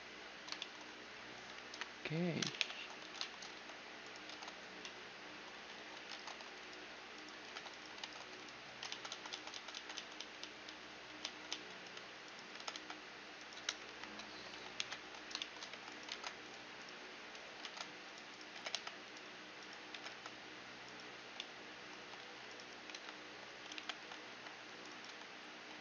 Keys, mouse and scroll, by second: 1.3 KP_1, 2.2 ctrl+KP_3, 2.6 z, 3.1 z, 3.6-6.4 drag, 3.9 ctrl+Tab, 5.1 z, 5.4 z, 5.7 ctrl+Tab, 7.0-8.9 right drag, 7.0 g, 7.6 ctrl+Tab, 8.5 ctrl+z, 8.9 ctrl+z, 9.8 ctrl+z, 10.0 ctrl+z, 10.4 ctrl+z, 10.5 ctrl+z, 10.9 ctrl+z, 11.1 ctrl+z, 11.9-14.4 right drag, 12.2 g, 13.5 KP_1, 14.4 ctrl+KP_3, 15.4 g, 16.7 ctrl+Tab, 17.2 ctrl+Tab, 17.9-21.2 right drag, 18.1 g, 19.5 g, 20.9-25.5 typing, 21.0-23.1 middle drag, 23.4 ctrl+KP_3, 24.6-25.8 right drag.